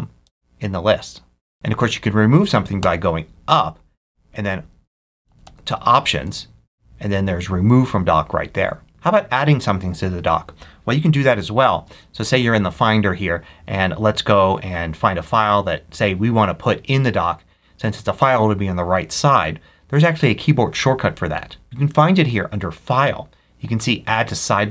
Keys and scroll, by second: 0.1 alt+Left, 2.7 Up, 4.9 alt+Up, 6.1 Right, 11.6 super+n.